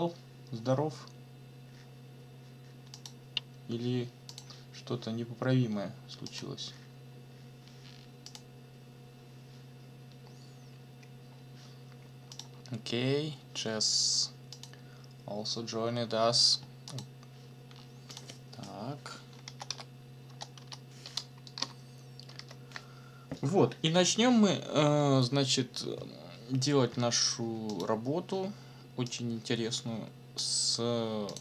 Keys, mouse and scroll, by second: 2.9 click, 4.3 click, 6.3 click, 12.3 click, 14.5 click, 16.9 click, 18.1 click, 19.2-20.6 typing, 21.6 Down, 22.4 Return, 27.7 click, 29.1-30.6 drag, 30.6 middle click, 31.3 click.